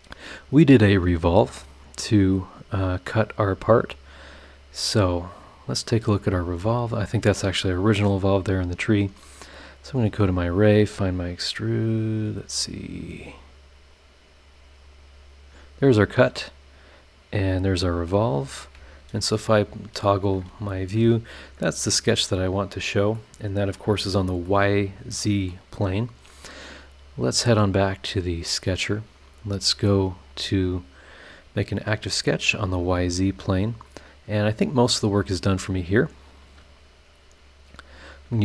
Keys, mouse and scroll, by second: 3.7 click, 5.7 click, 6.6 click, 7.7 click, 9.3 click, 10.4 click, 12.0 click, 13.0 click, 13.9 click, 14.8 click, 15.6 click, 16.0 click, 16.9 click, 17.5 click, 17.8 scroll down 1, 18.3 click, 18.7 space, 19.2-19.6 scroll up 1, 19.6 scroll down 2, 19.9 space, 22.2 click, 23.1 middle click, 23.2 click, 23.2 right click, 24.4-27.1 middle drag, 24.5-25.7 drag, 24.5-25.7 right drag, 27.1 click, 28.4 click, 31.2 click, 32.4 click, 33.1 click, 33.6-34.3 scroll down 4, 34.5-35.1 scroll up 4, 37.9 click.